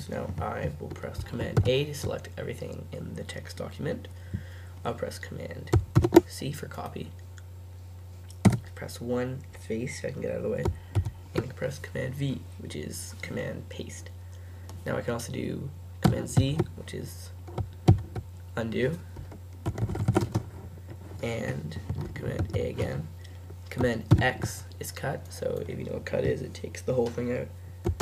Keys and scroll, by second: 1.6 super+a, 6.0 super+c, 8.5 Return, 11.0 super+v, 16.4 super+z, 20.4 typing, 22.4 super+a, 24.1 super+x.